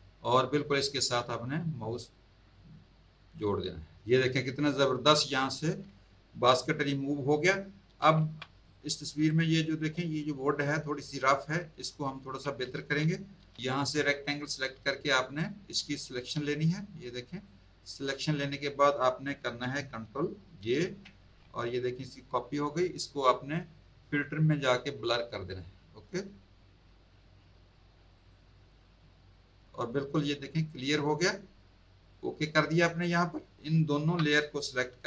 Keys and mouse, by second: 8.1 z, 8.6 click, 9.2 space, 9.3 click, 11.3 z, 11.7 alt+click, 12.0 alt+click, 13.3 m, 14.3 click, 15.9 click, 20.6 ctrl+j, 21.9 click, 24.0 click, 25.4 click, 28.1 click, 29.2 click, 31.9 click, 33.7 shift+click.